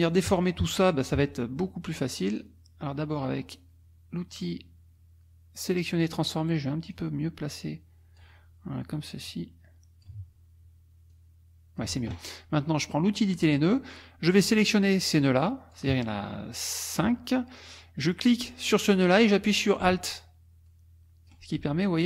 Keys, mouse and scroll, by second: 0.1 click, 2.3 click, 6.9-8.4 drag, 9.3 click, 11.1 click, 13.2 click, 14.4-15.9 drag, 18.4-19.8 drag, 20.0-21.5 alt+drag.